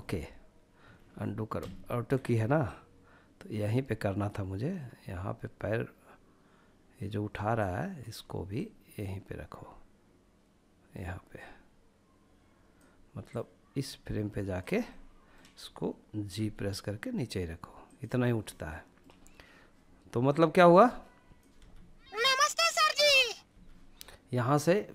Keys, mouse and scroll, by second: 0.1 ctrl+z, 0.7 ctrl+z, 1.6-10.5 drag, 12.3 click, 13.9-15.3 middle drag, 15.3 g, 16.9-17.4 drag, 17.4-18.4 middle drag, 19.4-20.4 drag, 20.5 space, 22.5 space, 24.6 click.